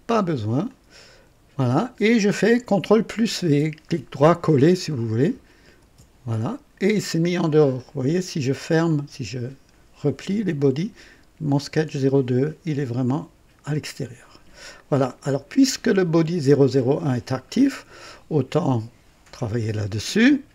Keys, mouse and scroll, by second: 0.7 click, 5.8 ctrl+v, 7.7 click, 8.9 click, 13.0 click, 13.7 click.